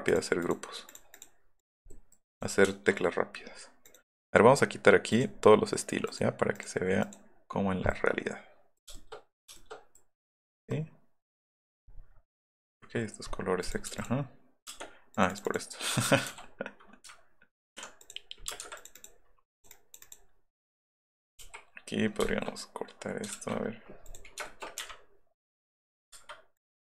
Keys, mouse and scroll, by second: 1.9 middle click, 2.7 shift+middle click, 3.9 right click, 5.1 right click, 7.7 middle drag, 8.8 shift+middle click, 10.6 middle click, 11.7 middle click, 12.0 middle click, 13.6 click, 14.0 click, 15.9 b, 16.3 v, 18.5 space, 18.6 Escape, 19.6 middle click, 19.7 middle click, 20.0 middle click, 20.3 middle click, 20.6 middle click, 21.0 middle click, 21.4 l, 22.0 middle click, 22.4 shift+middle click, 23.3 ctrl+g, 23.6 middle click, 24.9 scroll down 2, 26.2 Escape, 26.6 click.